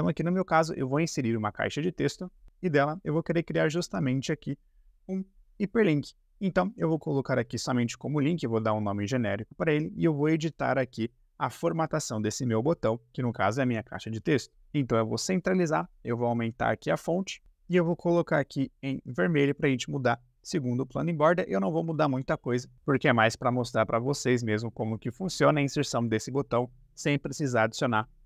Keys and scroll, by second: 6.4 Caps_Lock, 6.8-8.1 typing.